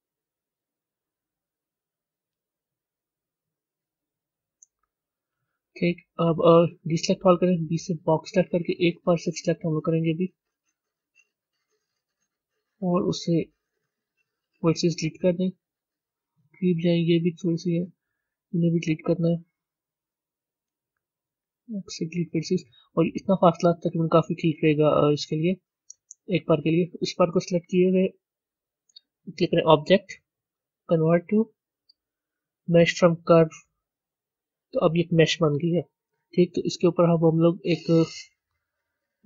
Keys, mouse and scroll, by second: 13.7 l, 15.1 scroll up 3, 24.0 scroll down 1, 25.9 Tab, 29.3-31.9 drag, 38.2 click, 38.9-39.2 drag.